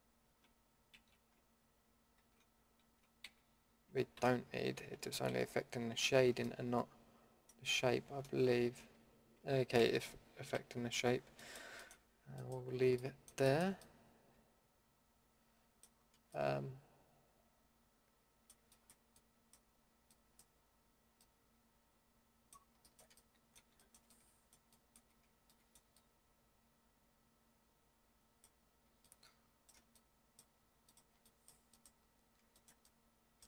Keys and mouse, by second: 0.9 ctrl+z, 2.2 ctrl+x, 3.2 ctrl+z, 4.1 ctrl+x, 5.3 ctrl+z, 6.5 middle drag, 8.5 ctrl+x, 9.8 ctrl+z, 10.5 a, 18.8-19.9 middle drag, 23.4 middle click, 23.8 middle drag, 25.5-26.1 middle drag, 31.2 middle drag, 31.4-31.8 middle drag.